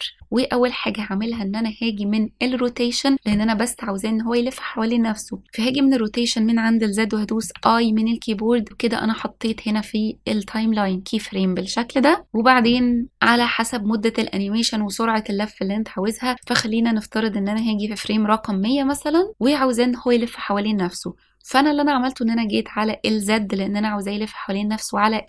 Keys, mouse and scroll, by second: 8.7 i, 10.8 click, 14.9-19.3 drag, 24.9-25.2 drag.